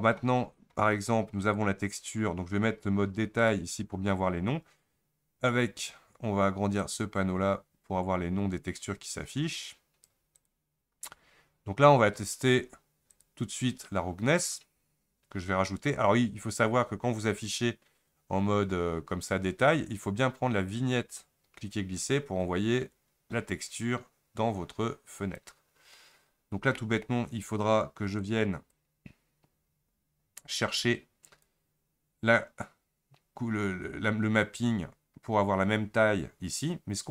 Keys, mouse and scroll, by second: 7.0-9.9 drag, 27.5-28.3 scroll down 7.